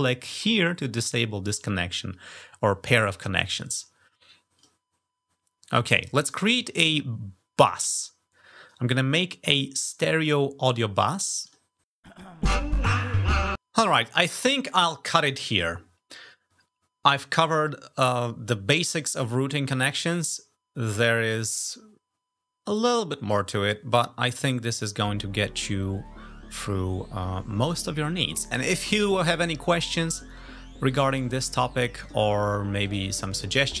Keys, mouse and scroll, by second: 0.0 ctrl+click, 4.4 click, 5.9 click, 7.4 click, 9.3 click, 11.2 click, 31.8 click, 32.7 click.